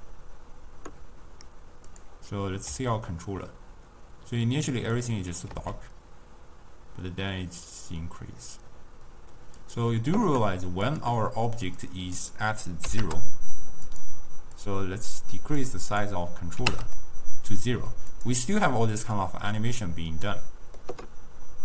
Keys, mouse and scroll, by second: 2.0 click, 2.8 s, 5.6 s, 11.0 click, 11.9-13.0 drag, 13.0 0, 13.1 Return, 14.7-18.4 drag, 18.7-21.6 middle drag.